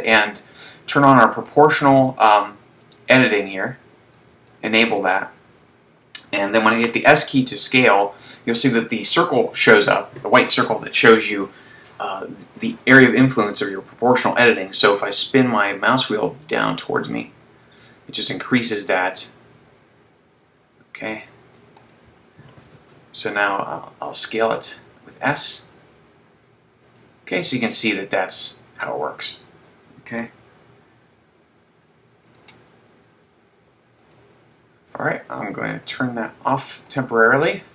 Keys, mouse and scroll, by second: 2.2 click, 7.0 s, 21.9 click, 23.7 s, 27.0 click, 30.6 s, 32.4 click, 32.8 s, 34.1 click, 35.9 click, 37.4 click.